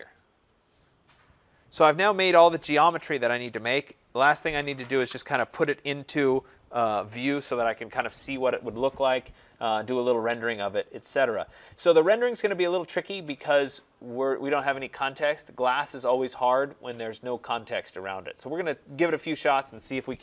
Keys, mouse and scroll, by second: 1.5-6.7 right drag, 9.1 scroll, 12.3 right click, 15.2-17.4 right drag.